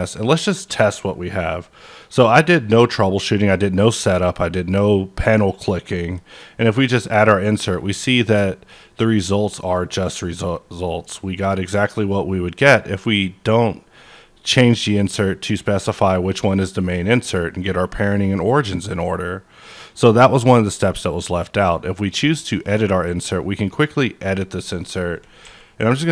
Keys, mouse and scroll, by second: 0.2-3.0 middle drag, 0.6 scroll down 1, 6.0 click, 6.0-6.8 scroll down 1, 7.8 click, 8.7-22.5 middle drag, 13.1-23.5 drag, 23.5-24.4 scroll up 3, 24.4-25.8 middle drag, 25.4 a, 25.8-26.1 middle drag.